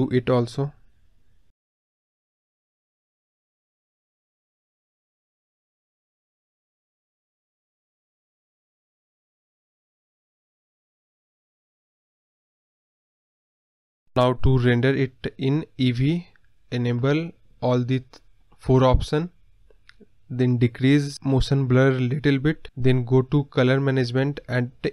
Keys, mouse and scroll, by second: 1.4-3.0 drag, 3.4 scroll down 2, 3.5 middle drag, 3.7-4.1 scroll up 4, 4.3 KP_0, 5.6 click, 6.1-6.5 scroll down 2, 8.2 click, 8.9-14.6 drag, 16.8-20.5 click, 20.5-24.9 drag.